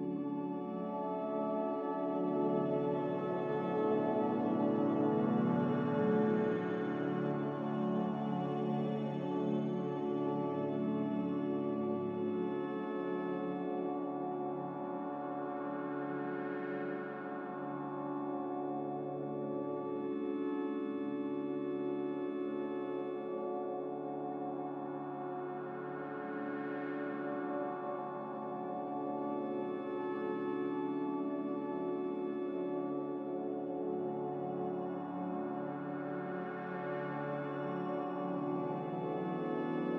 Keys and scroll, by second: 1.1-2.9 typing, 4.9 3, 5.9 2, 6.9 Return, 6.9 1, 11.9-13.7 typing, 22.1 x, 23.7 z, 25.8-26.7 typing, 29.6 ctrl+c, 31.6 ctrl+v, 38.4 ctrl+g.